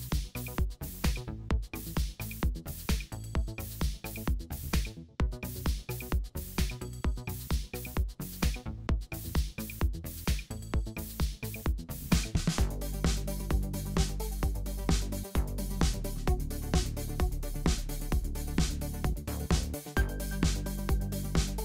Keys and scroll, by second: 1.4 super+7, 1.7 super+0, 7.0 BackSpace, 8.6 BackSpace, 13.7 BackSpace, 14.3 BackSpace, 15.8 BackSpace, 17.5 super+0, 18.8 alt+super+b, 20.5 w, 20.6 Return.